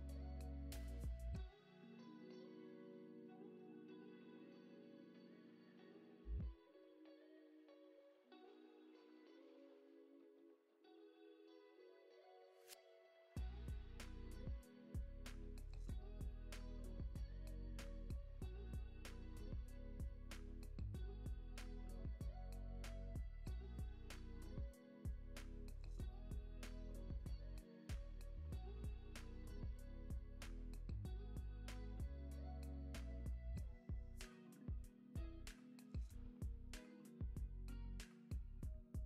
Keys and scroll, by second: 13.3 Right, 14.0 Right, 14.8 Right, 16.2 Right, 16.8 Right, 17.3 Right, 17.9 Right, 27.6 alt+w, 32.7 Right, 33.6 Right, 34.2 Right, 37.9 alt+w.